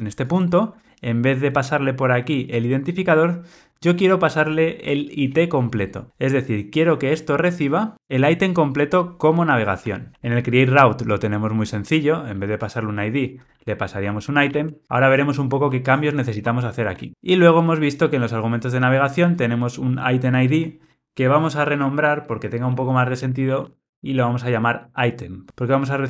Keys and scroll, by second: 10.1 super+b, 14.8 Escape, 16.4 alt+Return, 21.7 shift+F6.